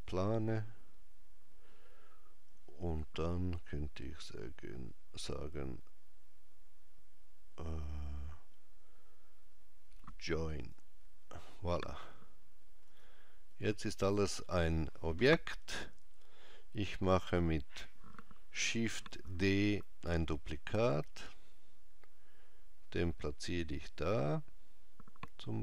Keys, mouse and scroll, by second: 12.6 click, 13.3 click, 18.9 shift+d.